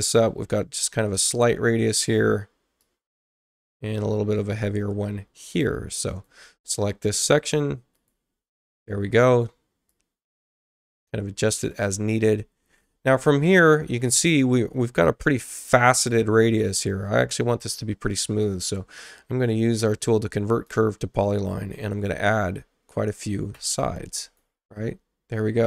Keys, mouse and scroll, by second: 0.0-1.1 drag, 2.8-4.5 drag, 6.0 click, 7.9 click, 9.8-11.7 drag, 20.5 click, 23.5 2, 24.2 click.